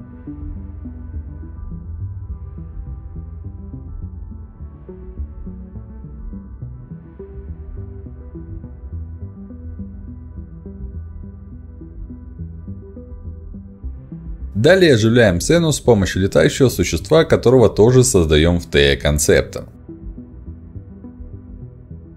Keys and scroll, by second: 8.1 BackSpace, 8.5 3, 8.6 Return, 17.8 ctrl+alt+d, 20.4 ctrl+z.